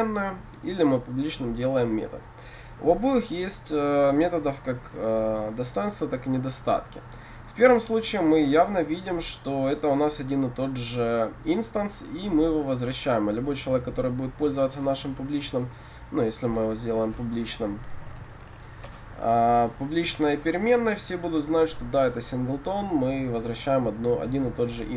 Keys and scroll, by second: 18.9 Return.